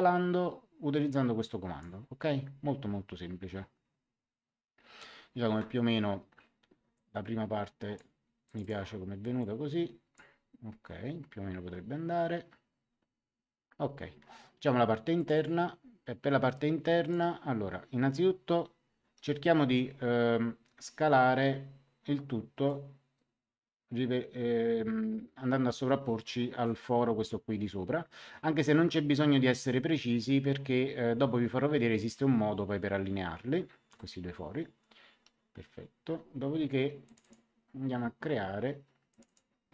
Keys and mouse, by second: 6.9 click, 8.4 click, 15.1 click, 17.0 click, 22.6 click, 37.0 click, 39.0 click.